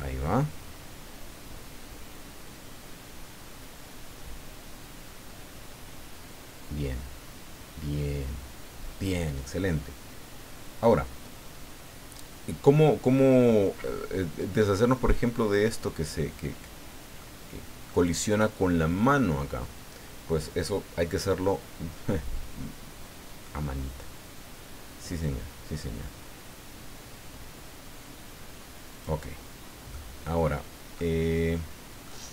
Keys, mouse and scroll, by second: 17.2 click, 28.9 click, 29.9-31.1 middle drag, 32.0-32.3 middle drag.